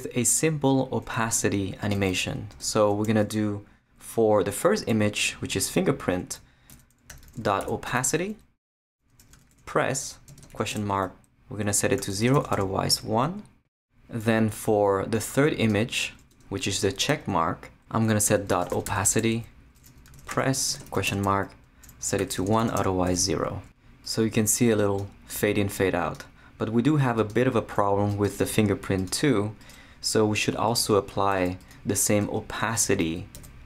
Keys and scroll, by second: 2.5 Return, 6.5-12.9 typing, 16.3 Return, 16.7 Tab, 18.4-23.6 typing, 31.3 shift+super+c, 31.9 super+c, 32.2 super+Return, 32.6 Tab, 33.2 super+Tab, 33.3 super+v.